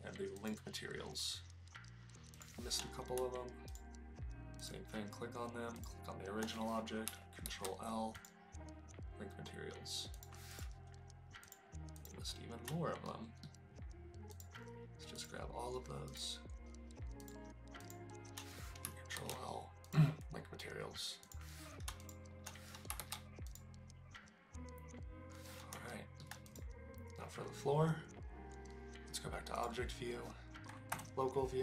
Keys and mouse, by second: 2.4 click, 3.7 shift+click, 5.8 shift+click, 7.4 ctrl+l, 10.2 click, 10.5 click, 11.5 click, 11.9 click, 13.0-13.5 shift+middle drag, 14.3 shift+click, 15.2 shift+click, 16.0 shift+click, 17.8 shift+click, 19.1 ctrl+l, 21.2 click, 22.0 shift+click, 23.0 ctrl+l, 25.9-26.2 shift+middle drag, 26.5 click, 29.6 click, 30.9 KP_Divide.